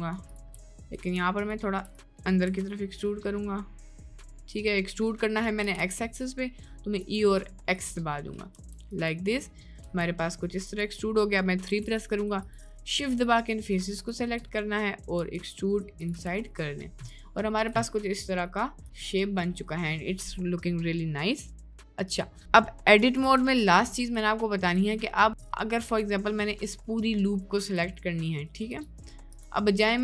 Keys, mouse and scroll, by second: 0.6 middle click, 2.2 middle click, 2.5 e, 5.6 g, 7.8 middle click, 8.6 Tab, 9.5 middle drag, 10.0 Tab, 10.2 middle click, 11.6 3, 12.4 shift+click, 13.2 click, 13.6 click, 14.6 middle click, 15.2 e, 16.3 Tab, 16.5-16.9 middle drag, 17.3-17.7 shift+middle drag, 17.8 middle drag, 18.5-18.8 shift+middle drag, 18.9 middle click, 19.9 middle click, 20.9 middle click, 22.9 click, 23.3 Tab, 23.7 middle click, 24.5 shift+middle click, 25.2 middle click, 25.8 1, 26.3 middle click, 27.1 middle click, 27.4 shift+middle click, 28.1 middle click, 28.8 click, 29.4 click.